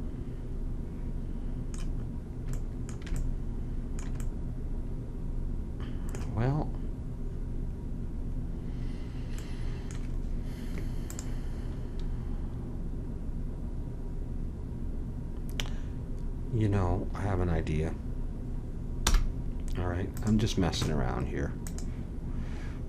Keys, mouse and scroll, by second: 11.1-13.1 drag, 19.0 m, 21.7-22.8 drag.